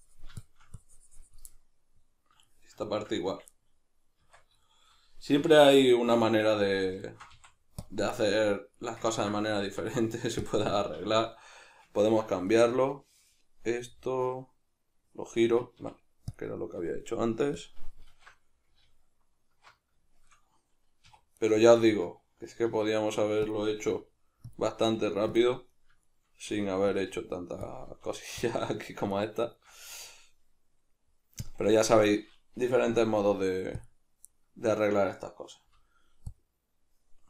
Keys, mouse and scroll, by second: 1.5-5.7 middle drag, 4.2 Tab, 5.4 3, 5.7 right click, 6.3 alt+right click, 7.1 alt+shift+right click, 7.3 x, 8.2-17.6 middle drag, 9.1 ctrl+z, 9.6 x, 12.0 ctrl+z, 15.8 x, 17.6 click, 18.1 alt+q, 20.1-21.4 shift+middle drag, 21.1 2, 21.4 right click, 21.8 shift+right click, 22.7 r, 23.5 click, 23.9 g, 24.6 click, 24.9 r, 25.4 click, 25.7 right click, 26.1 shift+right click, 26.5 r, 27.0 click, 27.1 g, 27.7 click, 27.9 r, 28.5 click, 29.1 shift+right click, 29.5 shift+right click, 29.9 w, 32.9 F9.